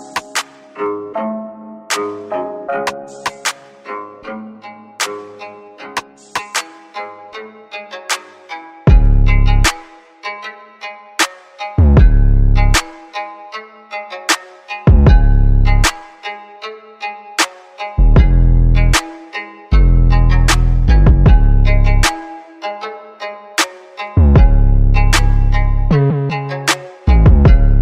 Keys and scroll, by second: 0.5 a, 0.9 space, 2.2-6.0 typing, 7.9-11.0 typing, 12.2 m, 13.3 a, 14.0 space, 17.8 n, 20.3 typing, 25.2 5, 25.3 Return, 26.8 typing.